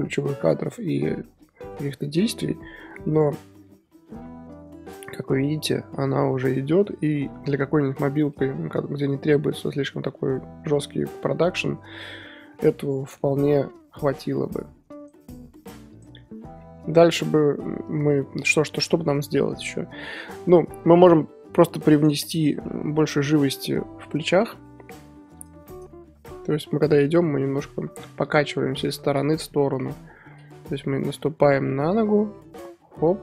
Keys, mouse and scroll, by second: 1.2-1.6 scroll down 4, 2.2 scroll down 1, 2.4-3.2 middle drag, 3.2-6.1 scroll down 1, 6.1-8.4 middle drag, 8.4-9.2 scroll up 5, 9.2-9.6 scroll down 4, 9.6-12.3 scroll up 3, 12.3 scroll down 2, 12.6-14.9 middle drag, 14.9-17.1 drag, 16.0-17.8 middle drag, 17.8-18.3 scroll up 1, 18.3-22.4 shift+drag, 18.3 shift+middle drag, 18.5 shift+scroll down 1, 18.7-19.7 scroll up 2, 19.7-20.4 scroll up 1, 20.4-21.0 scroll up 1, 21.0-21.7 scroll up 1, 22.4 scroll down 4, 22.6-24.7 middle drag, 23.5-25.4 drag, 24.7-25.4 scroll up 2, 28.9 click, 29.7 KP_1, 31.2-33.2 drag.